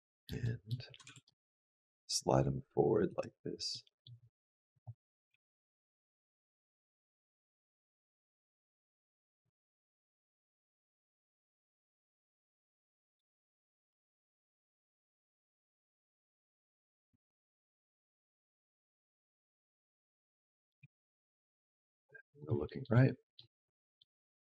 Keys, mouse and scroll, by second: 0.2 middle click, 0.9 g, 3.5 middle click, 4.0-4.5 scroll up 2, 4.5 click, 5.1 g, 7.8 r, 9.0 r, 12.5 middle click, 13.7 r, 14.8 middle click, 16.6 middle click, 16.9 r, 18.4 middle click, 19.4 click, 20.2 middle click, 20.6 r, 22.5 shift+middle click, 23.2 middle click, 23.5 middle click, 24.2 click.